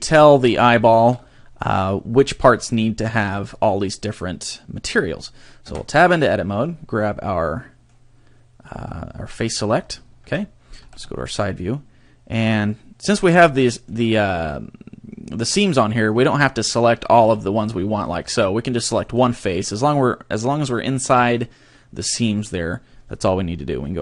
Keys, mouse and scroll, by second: 0.7 shift+middle click, 1.5-3.1 scroll up 6, 3.1 click, 3.4 click, 5.7 Tab, 7.4 middle click, 9.3 click, 10.2 KP_3, 10.8 a, 11.1 shift+middle click, 13.6 shift+middle click, 17.2 b, 18.3 a, 19.1 right click, 19.4 middle click.